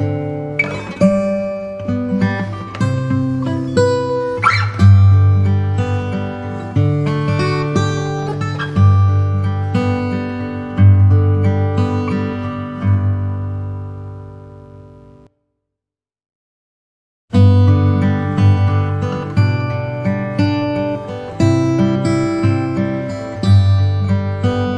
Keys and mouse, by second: 1.8 s, 3.6 s, 6.1 KP_1, 11.1 KP_3, 13.9 KP_1, 15.3 e, 18.8 middle click, 19.8 click, 21.4 ctrl+b.